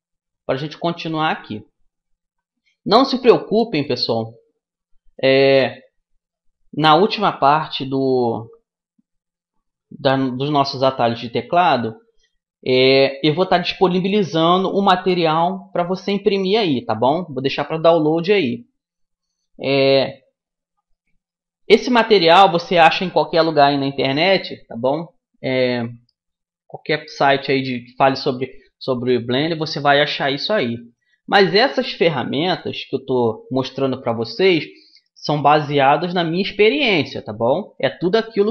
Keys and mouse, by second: 0.1-4.7 middle drag, 20.5 middle click, 21.2-23.9 right drag, 24.2-28.9 middle drag, 29.1 middle click, 30.4-38.5 middle drag.